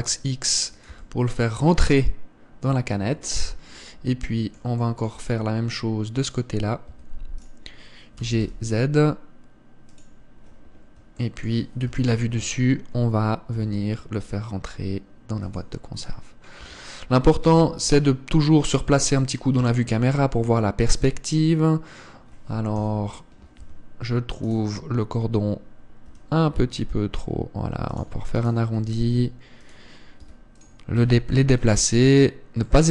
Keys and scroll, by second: 1.6 Tab, 7.6 Tab, 8.9 g, 12.5 KP_7, 14.2 g, 17.3 Tab, 18.1 KP_0, 23.5 KP_7, 24.3 Tab, 26.7 r, 29.3 r, 30.9 s, 31.7 g, 32.7 Tab.